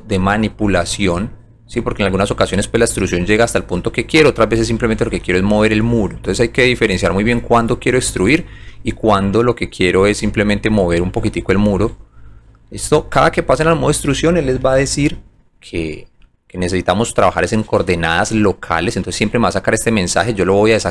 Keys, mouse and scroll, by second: 0.1 click, 1.6 click, 3.0 click, 5.1 click, 7.4 middle click, 8.1 alt+right click, 8.6 alt+click, 9.1 alt+middle click, 11.0 alt+click, 12.0 alt+click, 15.3 click.